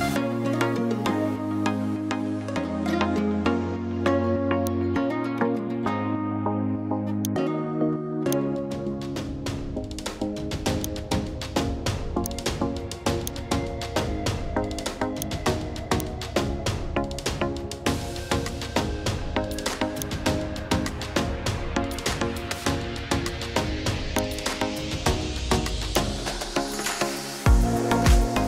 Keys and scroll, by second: 12.7 1.